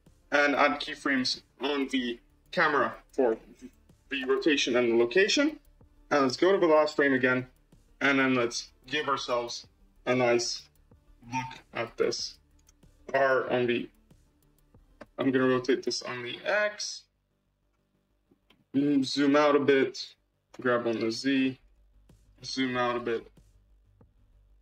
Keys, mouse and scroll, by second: 0.2 n, 1.5 click, 3.2 i, 4.1 i, 5.1 n, 6.8-8.8 drag, 8.8 g, 10.5 r, 14.9 n, 15.7-18.2 drag, 18.3 g, 20.4 g, 22.5 g.